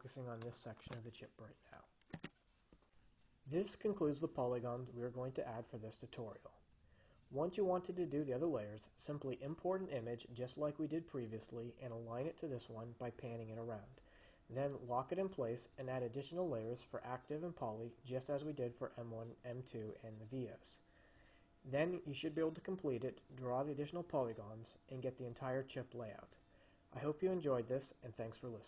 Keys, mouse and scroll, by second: 2.3 click.